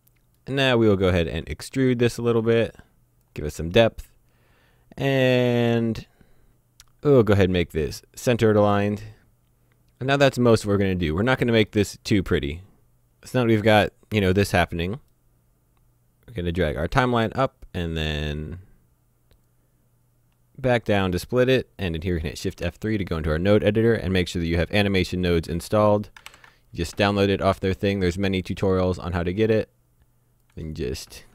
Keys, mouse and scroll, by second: 2.3 click, 6.5-7.8 scroll down 1, 7.8 click, 8.8 middle click, 10.4-11.1 scroll up 1, 11.3 shift+middle click, 12.0 click, 12.9 middle click, 14.8-15.2 scroll down 1, 15.2 middle click, 16.1 Escape, 16.6 click, 19.4 click, 22.5 F3, 26.1 ctrl+alt+Num_Lock, 26.3 ctrl+alt+u, 29.4 click, 30.4 click.